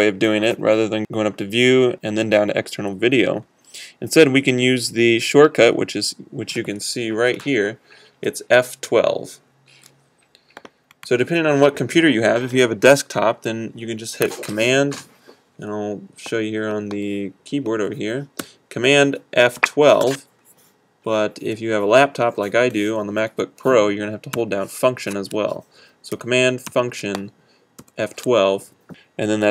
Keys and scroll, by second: 16.2 F3.